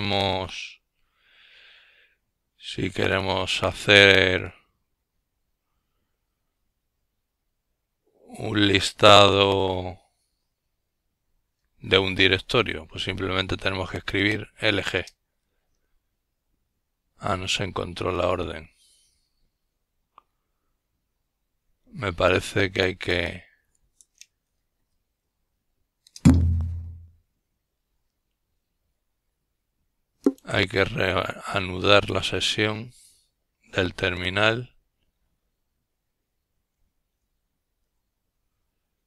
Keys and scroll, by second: 6.4-7.7 typing, 15.6-16.9 typing, 18.2 Return, 26.1 F12, 29.9 F12, 33.6-36.1 typing, 36.4 ctrl+Return.